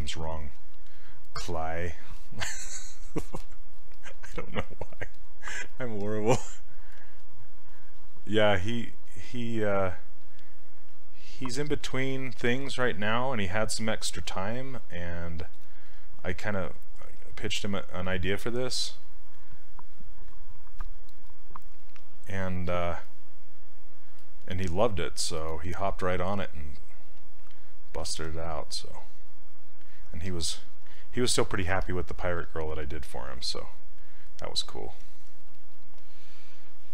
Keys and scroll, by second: 28.1 ctrl+z, 32.4 s.